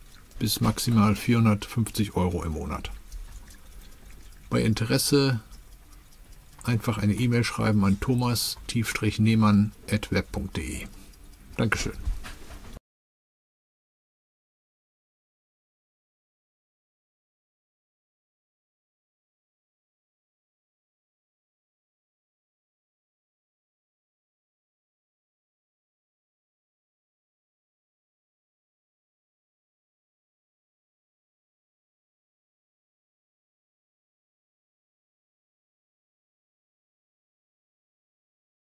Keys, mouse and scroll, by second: 0.6-2.6 drag, 5.2 click, 6.9 click, 9.3 click, 10.2 click, 15.1 click, 17.2 click, 20.3 click, 21.9 click, 24.4 click, 25.6 click, 26.8 click, 28.8 click, 29.9 click, 31.6-33.7 drag.